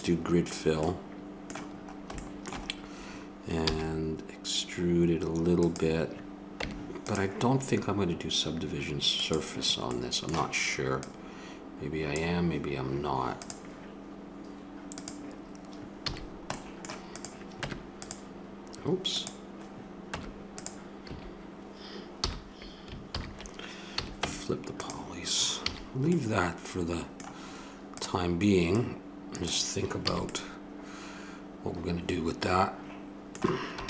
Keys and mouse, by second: 0.8 middle click, 1.6 middle click, 2.4-3.6 middle drag, 3.6 e, 6.6 Tab, 9.1-10.0 drag, 10.0-11.6 middle drag, 11.6-12.8 drag, 13.4-16.8 drag, 16.0 a, 17.1-18.6 drag, 17.6 Tab, 20.0 Tab, 21.0 a, 22.1 a, 23.1 ctrl+n, 23.9 a, 24.2 Tab, 25.6 a, 27.9-30.1 right drag, 30.1 a, 30.2-30.7 middle drag.